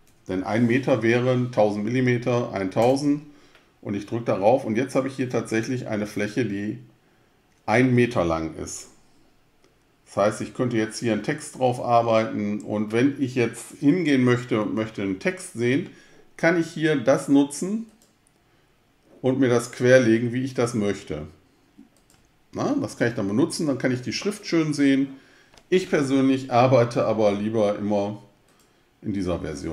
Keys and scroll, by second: 0.0-0.3 typing, 3.0 Return.